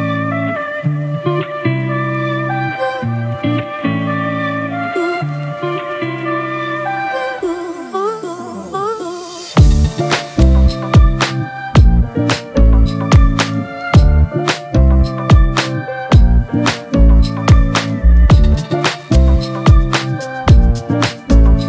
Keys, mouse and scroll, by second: 16.4 double click.